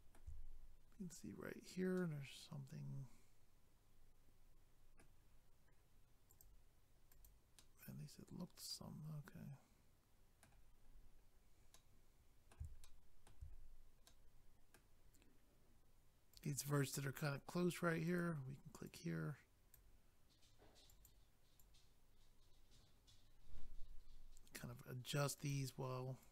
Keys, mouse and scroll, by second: 0.6 scroll up 1, 6.3 click, 6.4 click, 7.1 click, 7.2 click, 7.6 middle click, 10.8 scroll down 1, 11.6 scroll up 1, 11.7 middle click, 12.8 shift+middle click, 13.5 scroll up 1, 15.0-16.2 scroll up 1, 16.4 click, 16.4 click, 18.1 click, 18.2 click, 18.9 click, 20.9 click, 21.0 click, 21.6 click, 25.4 click, 25.5 click, 26.2 click.